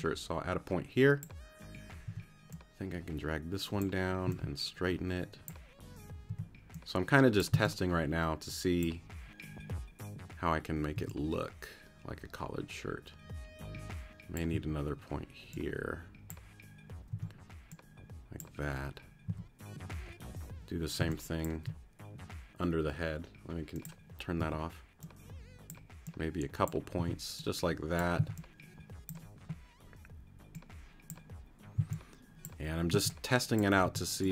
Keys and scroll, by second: 2.1 t, 4.3 c, 6.3 t, 7.5 c, 10.9 t, 14.5 a, 17.1 t, 19.3 a, 21.0 space, 24.4 a, 27.0 t, 28.2 c, 31.8 c, 32.9 c, 33.8 t.